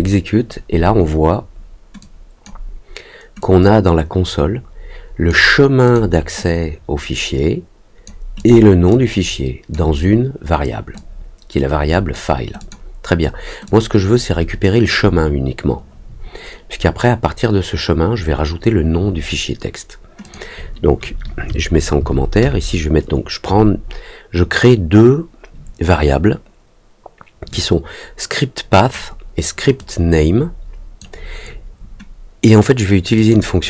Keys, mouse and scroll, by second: 1.9 click, 3.3-5.2 drag, 5.8 click, 6.3-8.0 drag, 8.3 click, 8.8 click, 10.9-12.1 drag, 12.5 click, 13.6-14.8 drag, 20.2 click, 27.4-28.9 drag, 29.7-30.9 drag, 33.1 click.